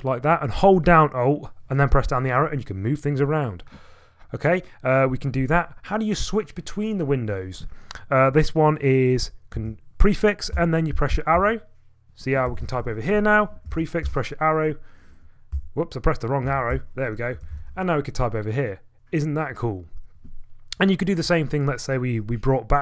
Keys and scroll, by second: 9.5 ctrl+a, 10.5 Left, 10.9 Right, 11.3 Left, 12.2-13.2 typing, 13.7 ctrl+a, 14.0 Down, 15.5 Right, 16.5 ctrl+a, 16.7 Right, 17.1-18.3 typing.